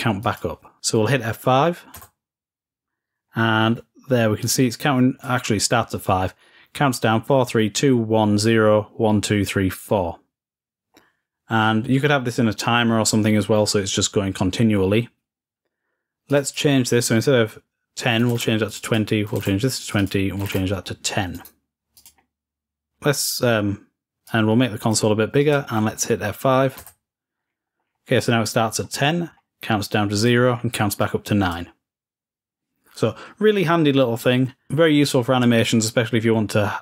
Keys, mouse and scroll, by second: 0.0 click, 3.1-4.2 scroll up 2, 4.3-6.0 drag, 6.1-7.0 scroll down 2, 9.5-10.5 scroll down 2, 10.8-11.3 scroll up 1, 11.3-12.9 scroll up 1, 16.2 click, 16.3-18.5 drag, 18.6 click, 18.7 click, 19.7 click, 19.9 click, 21.1 right click, 21.7 click, 21.9-22.9 drag, 24.0-25.2 drag, 25.3-26.6 drag, 27.2-28.6 scroll up 2, 29.0-29.7 scroll down 2, 30.1 click, 30.3-30.8 scroll down 2, 31.3-33.8 drag, 34.1-36.8 middle drag.